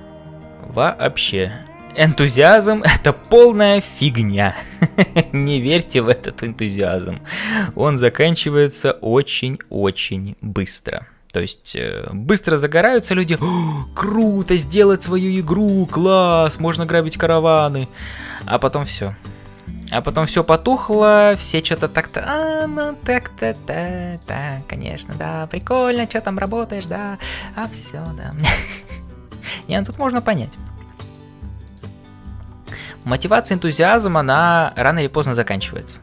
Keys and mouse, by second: 0.0-36.0 typing, 2.4 shift+right click, 4.4 middle click, 7.6 middle click, 14.2 middle click, 15.5 middle click, 16.0 middle click, 17.2 click, 22.0 click, 24.1 click, 25.5 click, 26.8 click, 28.3 click, 31.6 click, 35.7 click.